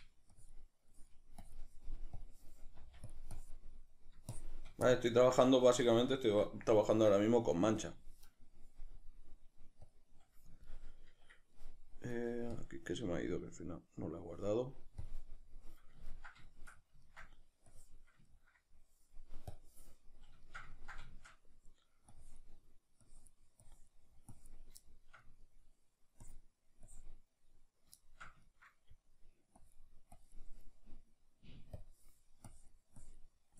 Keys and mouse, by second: 0.4-2.8 drag, 2.8 f, 4.9-13.6 middle drag, 13.6 click, 16.1-17.7 ctrl+middle drag, 17.7 click, 18.3-20.1 ctrl+middle drag, 20.1 click, 20.5-22.2 ctrl+shift+middle drag, 22.2-24.9 drag, 24.9-26.2 shift+middle drag, 26.2-28.0 drag, 28.0-29.6 shift+middle drag, 29.6-33.5 drag.